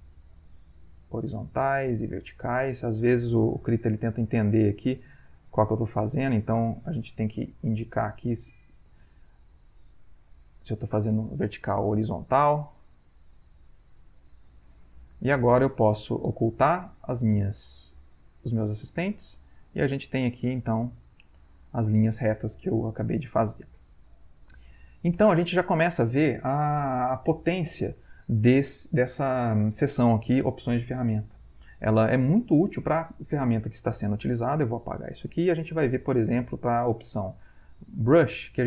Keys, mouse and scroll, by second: 0.9 click, 2.1 click, 3.1 ctrl+z, 4.2 click, 5.2 click, 6.6 click, 7.6 click, 8.6 click, 9.4 click, 10.6 click, 12.9 click, 13.8 click, 17.9 click, 19.1 click, 19.9 click, 20.7-22.3 middle drag, 22.8-24.8 middle drag, 22.8-23.6 scroll, 23.6 ctrl+scroll, 35.0 Delete, 36.3 click, 37.6-38.6 middle drag.